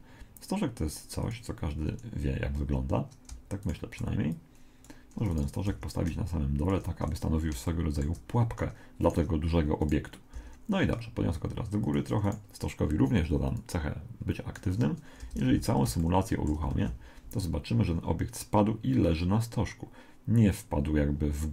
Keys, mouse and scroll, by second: 0.0 shift+a, 3.6-7.1 right drag, 4.3 click, 5.7 g, 7.2-9.5 middle drag, 9.0-11.6 right drag, 10.3 g, 12.2 right click, 13.5 click, 15.6 z, 16.0-17.7 middle drag, 16.7 alt+a.